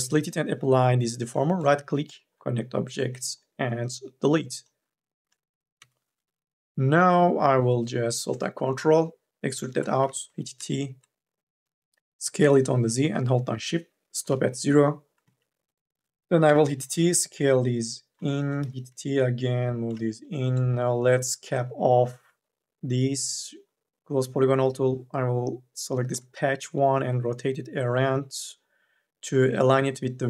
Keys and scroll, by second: 5.6 2, 5.9 e, 10.1 t, 14.5 shift+e, 15.4 e, 16.3 t, 18.4 e.